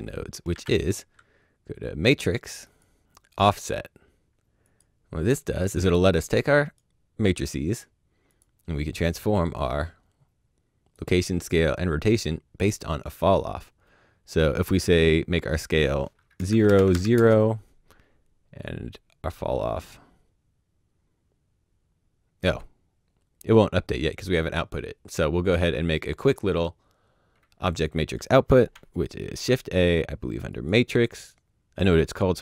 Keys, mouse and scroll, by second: 0.5 shift+a, 1.8 click, 2.3 click, 3.3 click, 5.8 click, 8.2 click, 10.9 click, 15.5 click, 16.3 KP_0, 16.4 Tab, 16.6 KP_0, 16.7 Tab, 16.9 KP_0, 17.1 KP_Enter, 19.2 click, 25.5 click, 27.2 middle click, 28.0 middle click, 28.0 click, 29.2 shift+a, 30.5 click.